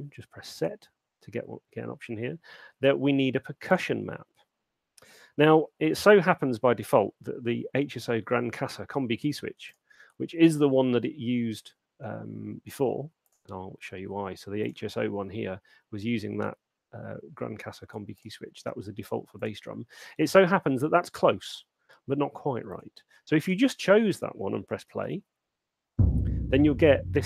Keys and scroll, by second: 23.8 super+2, 25.0 alt+shift+space.